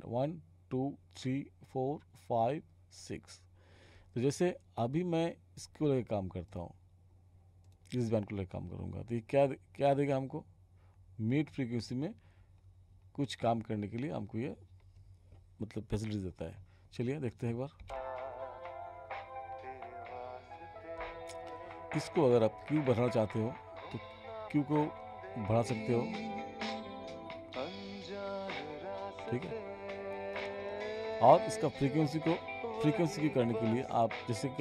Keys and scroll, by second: 17.8 space.